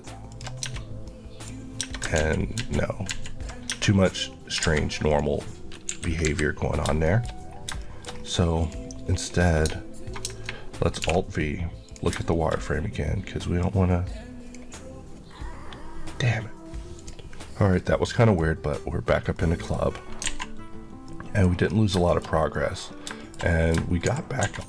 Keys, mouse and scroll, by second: 0.4 shift+click, 0.7 Tab, 1.2 middle click, 1.9 Tab, 2.3 ctrl+z, 3.8 Tab, 4.3 scroll down 1, 4.7 alt+a, 5.1 click, 6.0 KP_1, 6.3 KP_3, 7.1 shift+middle click, 7.4-7.9 scroll down 2, 7.9 shift+middle click, 8.3-8.7 scroll down 1, 8.7 click, 9.1 scroll up 1, 11.1 alt+v, 11.9 click, 12.4 shift+middle click, 12.7-13.7 scroll up 1, 13.7 click, 16.9 Left, 19.2 middle click, 19.6 scroll up 1, 20.1 alt+a, 20.9 middle click, 21.4 scroll down 1, 21.8 shift+middle click, 22.1 scroll down 1, 22.3 middle click, 22.9 shift+scroll down 1, 23.0 shift+middle click, 23.9 shift+c, 24.2 shift+a.